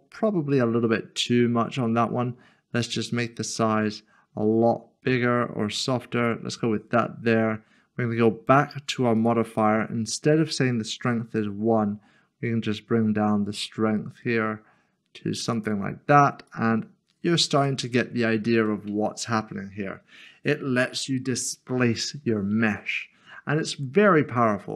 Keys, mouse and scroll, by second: 2.8 click, 9.2 click, 18.7 middle click, 23.6 middle click.